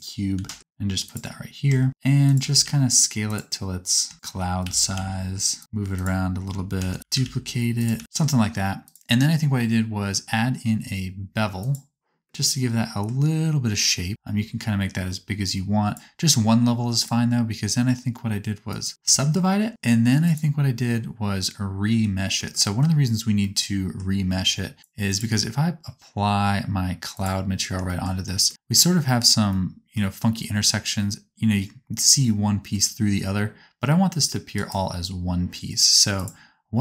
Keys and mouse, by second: 0.3 g, 1.6 Tab, 1.9 s, 2.6 s, 4.1 shift+d, 4.7 s, 5.6 g, 6.9 shift+d, 7.0 s, 7.9 g, 8.0 Tab, 9.6-11.0 drag, 20.9-24.8 drag, 25.0-31.8 drag.